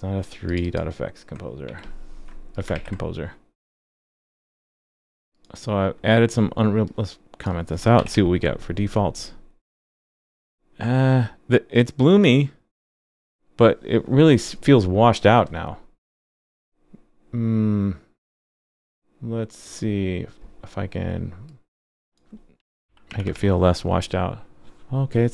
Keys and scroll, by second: 2.7 super+s, 8.0 super+/, 23.3 super+s.